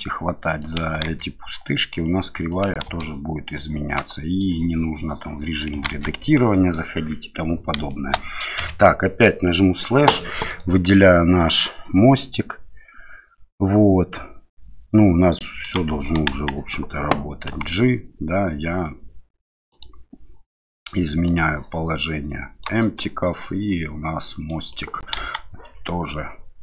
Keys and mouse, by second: 1.0 ctrl+z, 2.0 click, 2.8 ctrl+z, 3.5-4.0 drag, 4.4-5.6 drag, 6.0 ctrl+z, 6.2-6.7 middle drag, 7.9 shift+middle drag, 8.6 KP_Divide, 10.5 click, 15.6 click, 16.3 KP_1, 17.5 g, 19.7 click, 21.2-22.6 drag, 22.9-24.5 middle drag, 25.1 KP_1, 25.8-26.6 drag.